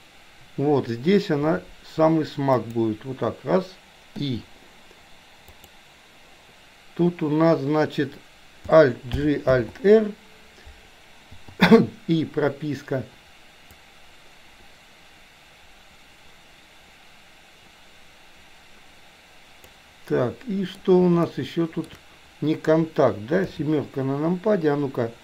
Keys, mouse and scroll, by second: 1.5 r, 4.3 i, 5.6 click, 9.3 alt+g, 9.6 alt+r, 11.5 i, 13.9-19.9 drag, 20.3-20.8 middle drag, 21.4-21.9 shift+middle drag, 23.5 KP_7.